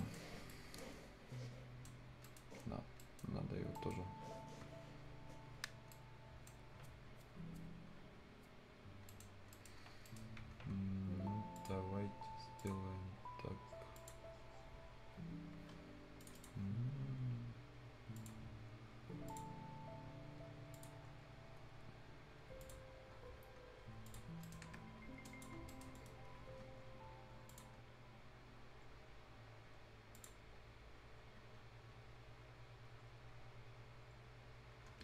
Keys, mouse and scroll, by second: 0.0 shift+right click, 0.3 shift+scroll down 1, 0.5-2.0 shift+right drag, 2.0-2.8 shift+scroll up 2, 2.2 shift+right click, 2.8 shift+scroll down 1, 3.0 shift+right click, 3.5 shift+scroll up 1, 3.8 shift+right click, 4.1 shift+scroll down 1, 5.7 shift+scroll up 1, 5.9-9.1 shift+right drag, 8.8 scroll up 1, 9.1 shift+right click, 9.3 shift+scroll down 1, 9.5 shift+right click, 9.9 shift+scroll up 1, 10.1 shift+right click, 11.6 shift+click, 12.9 shift+scroll up 1, 14.0 shift+click, 14.2 shift+scroll down 1, 14.4 shift+scroll up 1, 16.2 shift+click, 16.9 shift+scroll up 1, 18.2 shift+click, 18.4 shift+scroll down 1, 18.6-19.2 shift+scroll up 1, 19.3 shift+click, 19.5 shift+scroll down 1, 19.7 shift+scroll up 1, 20.7 click, 21.3-22.1 shift+scroll up 3, 22.6 shift+click, 22.9 shift+scroll down 1, 23.6-24.1 shift+scroll up 1, 24.1 shift+click, 24.4 shift+right click, 24.7-25.0 shift+scroll up 1, 25.3 shift+click, 25.6 shift+scroll down 1, 25.7 shift+right click, 26.0 shift+middle click, 26.0-27.5 shift+scroll up 1, 27.5 shift+click, 27.8 shift+scroll up 1, 30.2 shift+click, 30.4-31.2 shift+scroll down 1, 31.6-32.0 shift+scroll up 1, 34.3 shift+scroll up 1, 34.9 shift+scroll down 1.